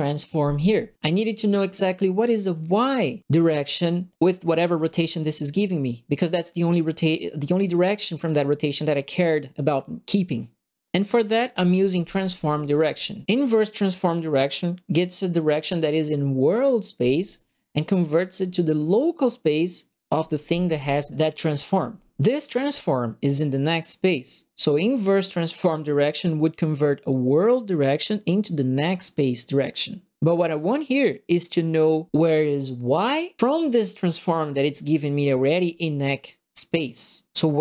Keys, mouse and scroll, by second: 1.1 right click, 4.7 click, 6.0 click.